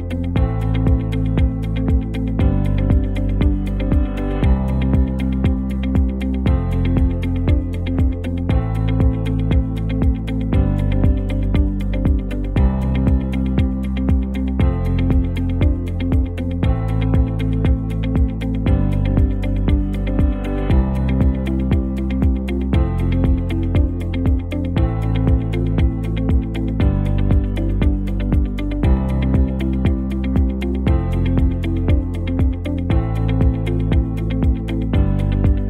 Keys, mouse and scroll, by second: 13.2-13.7 drag, 16.0 click, 18.7-21.4 drag, 28.2-29.3 drag, 34.2 click.